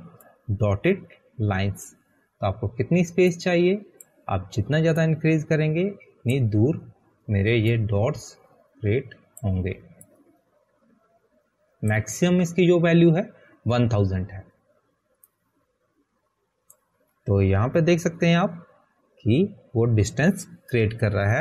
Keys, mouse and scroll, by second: 21.1 click.